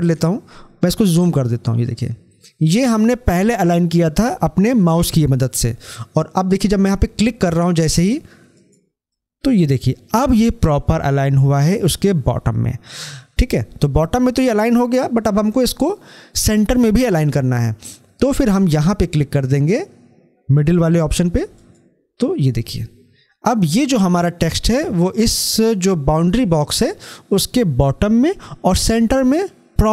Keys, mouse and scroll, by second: 0.8 scroll up 1, 8.3 click, 13.6-13.9 scroll down 1, 21.4 click.